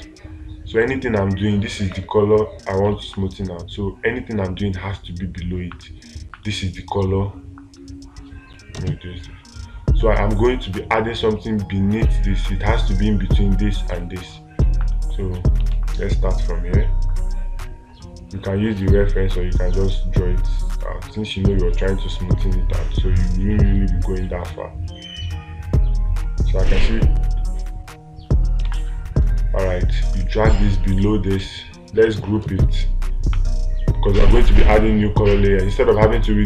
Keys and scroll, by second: 16.2 space, 29.1 space.